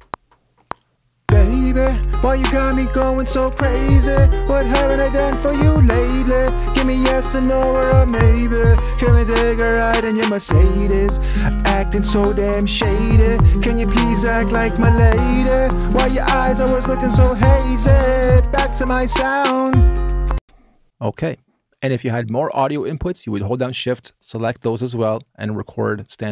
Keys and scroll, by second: 20.1 space.